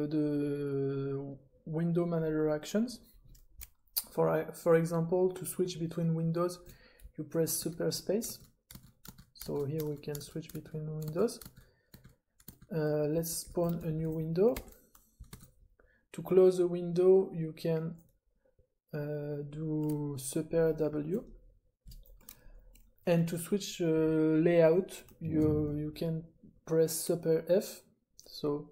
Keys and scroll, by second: 7.6 super+space, 8.2 super+space, 8.7-13.1 super+space, 13.1 s, 15.3 super+r, 15.3 typing, 21.0 super+w.